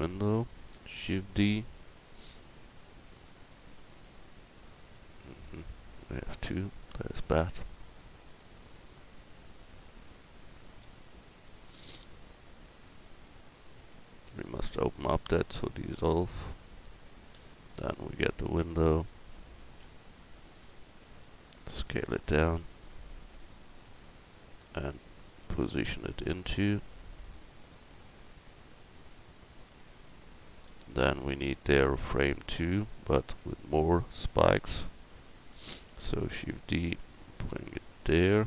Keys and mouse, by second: 1.0 shift+d, 7.6-8.6 middle drag, 9.1 right click, 10.8 x, 14.2 x, 17.3 l, 17.9-18.9 middle drag, 18.9 KP_1, 19.6-20.7 right drag, 21.7 s, 26.4 middle click, 30.7 a, 31.9 Tab, 32.5 right click, 33.4 Tab, 34.3 a, 34.5 a, 35.9 shift+d, 36.6 click.